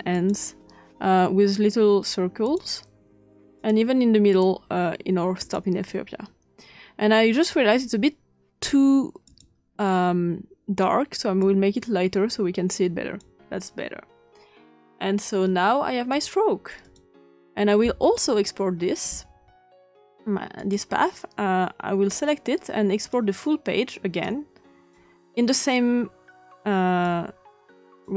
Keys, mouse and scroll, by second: 0.1 click, 2.4 click, 3.5 click, 4.2 click, 4.4-6.2 drag, 9.2 click, 11.4-13.2 drag, 13.3 click, 16.0-17.7 drag, 18.0-19.7 ctrl+scroll down 2, 19.7-20.7 scroll up 2, 20.5 click, 20.9 click, 23.0 click, 24.2-25.5 drag, 27.0-28.1 drag.